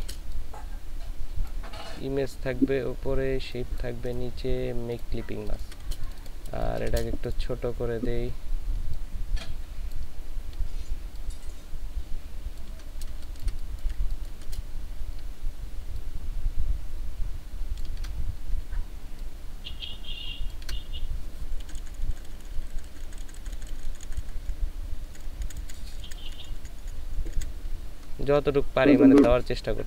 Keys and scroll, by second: 5.5 ctrl+space, 6.6 ctrl+space, 13.2 ctrl+shift+space, 13.9 ctrl+shift+space, 21.6 Up, 21.8 Up, 22.0 Up, 22.1 Up, 22.7 Up, 23.3 Up, 24.5 Up, 25.2 Up, 25.4 Right, 25.6 Right, 26.9 Down, 27.4 Down.